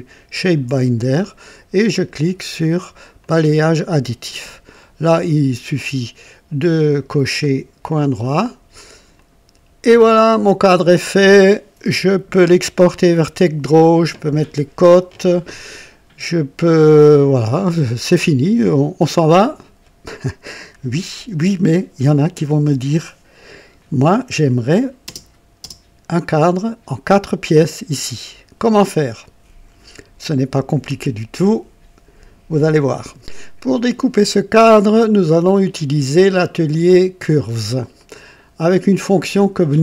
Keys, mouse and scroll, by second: 0.3 ctrl+click, 3.2 click, 4.7 click, 7.1 click, 7.9 click, 9.1 click, 10.3-11.7 drag, 11.9 KP_2, 12.4 KP_1, 13.1-13.4 scroll up 1, 13.8 right click, 16.7-24.0 drag, 24.5 click, 25.0-25.8 typing, 34.4-36.1 drag, 36.9 click, 37.9 click.